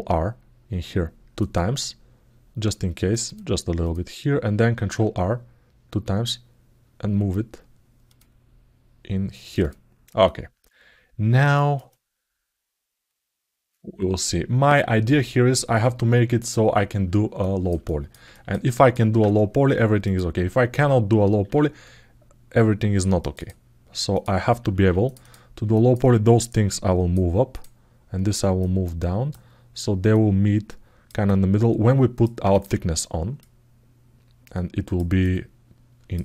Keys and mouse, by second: 3.0 click, 4.6 ctrl+r, 9.4 click, 10.0-11.2 alt+middle drag, 11.3 alt+shift+middle click, 11.7-13.9 alt+middle drag, 17.2 ctrl+alt+middle click, 17.6 alt+shift+middle click, 18.1 ctrl+alt+middle click, 18.5 alt+shift+middle click, 19.8 click, 21.2 ctrl+r, 23.9 click, 25.5 middle click, 26.2 click, 28.4 click, 29.9 click, 31.0-32.0 alt+middle drag, 32.3 click, 33.2-34.7 drag, 35.0 alt+middle click.